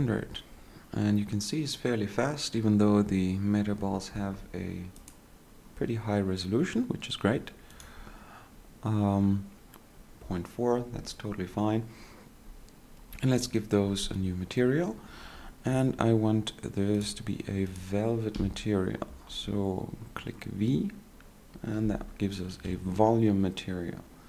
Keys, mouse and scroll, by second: 22.0 x, 23.7 ctrl+z.